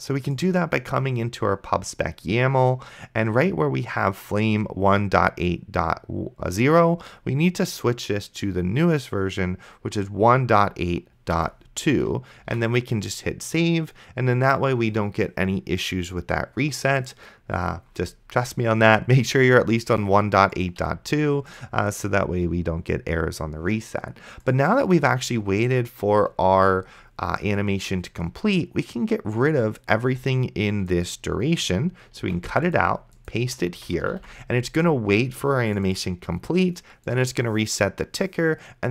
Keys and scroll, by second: 11.6 2, 12.7 ctrl+s, 25.5 Return, 32.5 ctrl+x, 33.4 Tab, 34.4 ctrl+v.